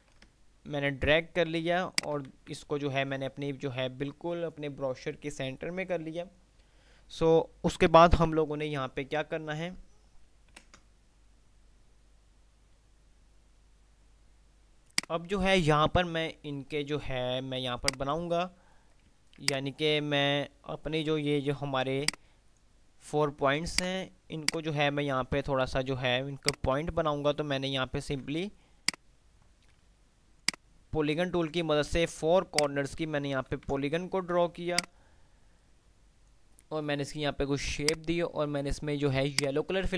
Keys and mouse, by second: 2.4 c, 10.6 ctrl+F10, 14.9 click, 17.9 click, 19.6-20.1 alt+drag, 28.8 alt+F2, 30.6 alt+click, 33.8 ctrl+alt+z, 34.9-36.6 alt+drag, 39.4 alt+right click, 39.9 alt+F3.